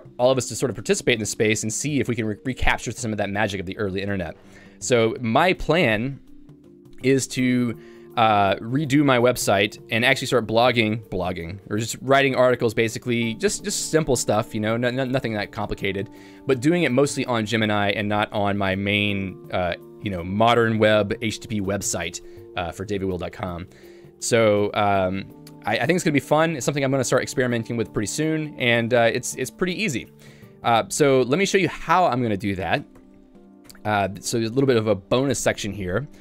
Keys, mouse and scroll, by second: 33.7 Tab, 34.3 j.